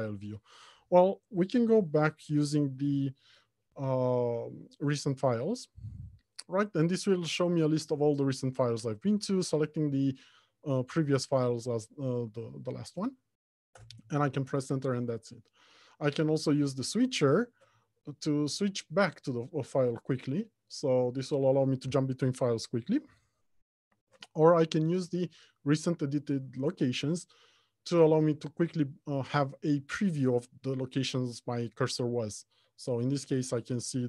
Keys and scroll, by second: 4.5 ctrl+e, 18.0 ctrl+Tab.